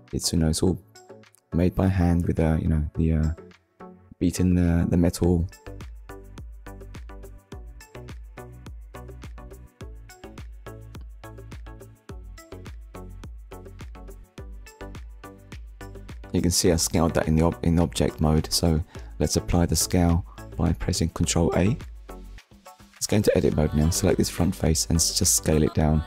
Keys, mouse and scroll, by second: 1.6 click, 2.1 shift+click, 4.7-5.2 scroll down 2, 5.8 middle click, 7.9 KP_1, 10.5 click, 13.2 middle click, 16.2 ctrl+a, 17.0 click, 17.8 shift+middle click, 18.2 middle click, 20.1 Tab, 21.1 click, 22.0 click, 22.6 middle click.